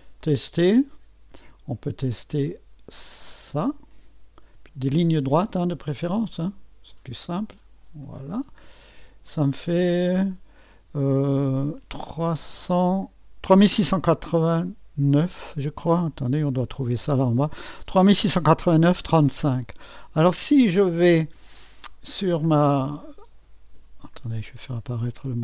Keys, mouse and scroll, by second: 0.2-3.5 right drag, 1.0-3.5 scroll up 1, 3.5-5.6 drag, 5.6-8.0 middle drag, 8.0-14.3 drag, 15.5-19.3 scroll down 2, 21.8 scroll down 2, 24.6-25.1 scroll up 1, 25.1-25.4 drag.